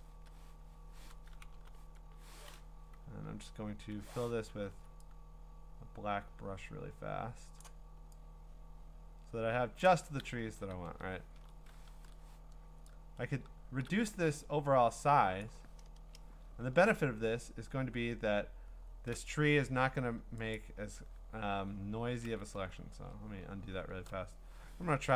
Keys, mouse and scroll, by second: 0.1 BackSpace, 0.7 Escape, 1.5 b, 3.9 5, 4.7 x, 5.3 click, 5.6 ], 7.6 click, 9.8 click, 10.8 ctrl+d, 11.3 alt+scroll, 11.9 ctrl+t, 15.4 click, 15.9 Return, 16.5-17.6 scroll, 17.6-18.1 scroll up 17, 18.6-19.1 scroll down 11, 20.6 ctrl+click, 20.7 scroll, 21.7-22.9 scroll, 22.4 ctrl+z, 22.9 ctrl+z, 23.5 click, 23.8 scroll, 25.0 ctrl+j.